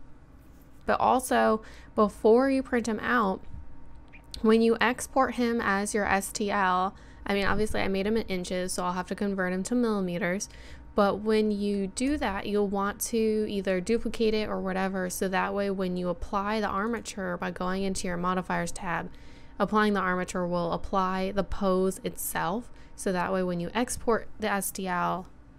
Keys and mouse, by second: 1.2-12.1 middle drag, 12.1-16.8 right drag, 16.8 middle click, 17.1-18.6 drag, 18.6-23.7 middle drag.